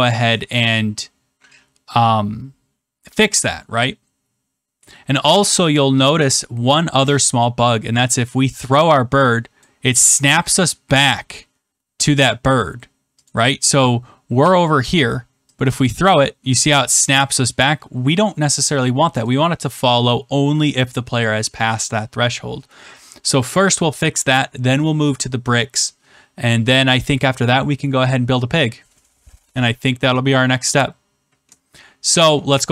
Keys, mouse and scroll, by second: 5.1 click, 9.5 click, 11.0 click, 13.2 click, 14.2 click, 15.9-17.0 drag, 19.2-32.7 drag.